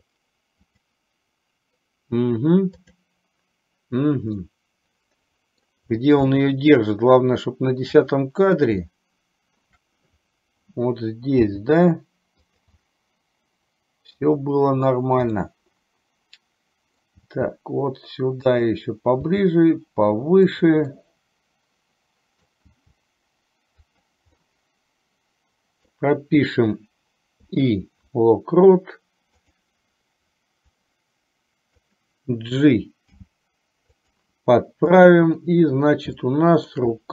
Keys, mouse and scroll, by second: 0.9 click, 3.0 click, 4.6-5.7 middle drag, 6.5 shift+middle click, 8.2 click, 9.0 shift+middle click, 11.7 g, 12.9-14.4 middle drag, 15.5-17.1 middle drag, 17.4 g, 19.5 g, 21.1-22.6 middle drag, 23.0 g, 24.5-26.0 middle drag, 27.6 i, 29.5 click, 31.0-32.1 drag, 33.1 g, 35.2 click, 36.2 shift+middle click.